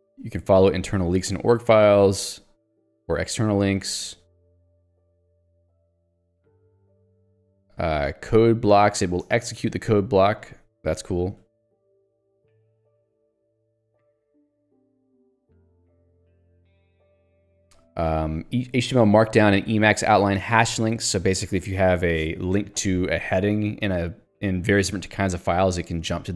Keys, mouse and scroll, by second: 2.3 j, 8.0 k, 10.3 j, 15.3 k, 16.3 j, 25.8 click.